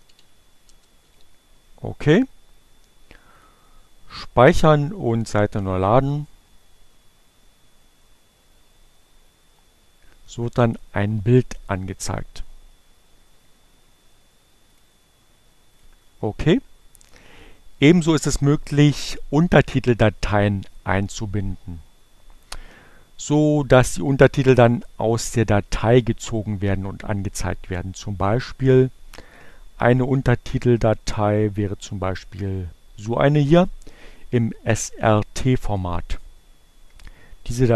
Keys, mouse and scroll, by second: 0.0-3.0 typing, 5.0 click, 6.3 click, 7.6 click, 18.2 click, 19.7 click, 32.4 click.